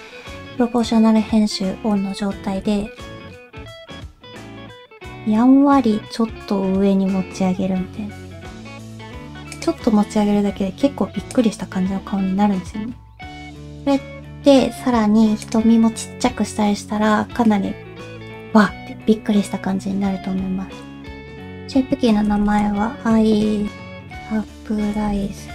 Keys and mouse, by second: 2.5 g, 10.1 Tab, 11.3-13.5 drag, 13.5 /, 15.4 click, 21.0-25.5 drag, 23.7 BackSpace.